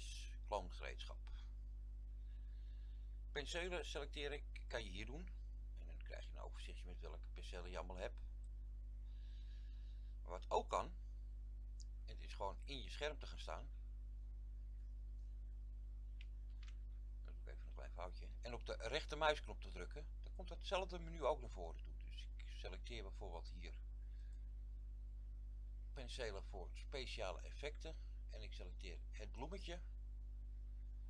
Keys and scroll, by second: 16.5 ctrl+z.